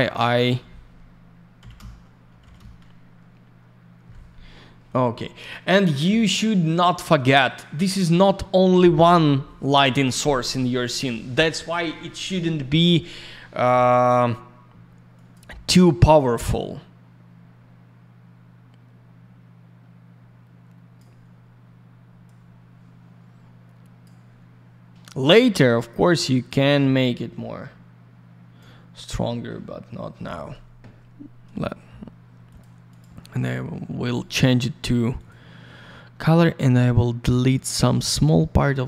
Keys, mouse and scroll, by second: 0.2 click, 1.7 Return, 2.5 Return, 5.1-5.8 scroll down 1, 15.1 click, 15.3 click, 16.2 click, 22.2 click, 26.2 click, 32.4 click, 32.5 click, 32.8 click, 32.9 double click, 34.0 click, 34.1 click, 35.1 click, 35.2 click, 38.1 click, 38.2 click.